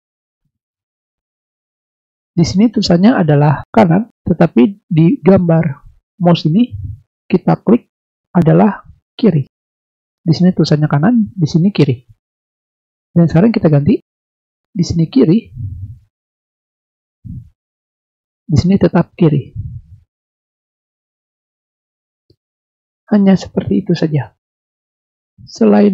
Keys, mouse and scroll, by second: 0.0-0.9 drag, 7.1 click, 7.8 click, 9.1 click, 13.7 click, 15.1 right click, 16.4 click, 17.6 click, 20.1 click, 20.6 click, 21.1 click, 21.7 click.